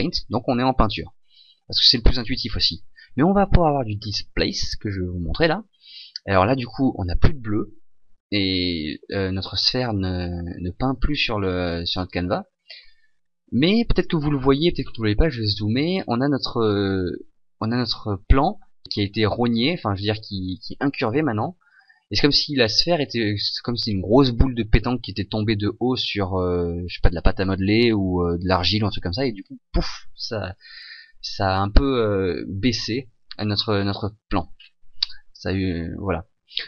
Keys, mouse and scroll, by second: 14.8-18.1 scroll up 4, 34.6-36.6 scroll down 1.